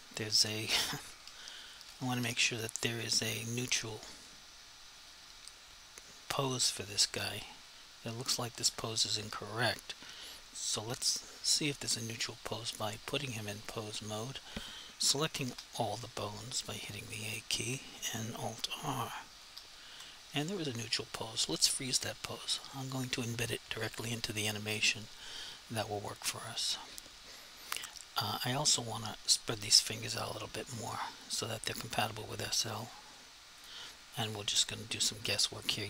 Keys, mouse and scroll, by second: 1.3 1, 2.2 7, 12.9 click, 15.5 a, 19.4 alt+r, 22.6 click, 31.4 click, 32.0 r, 33.6 click, 34.6 r.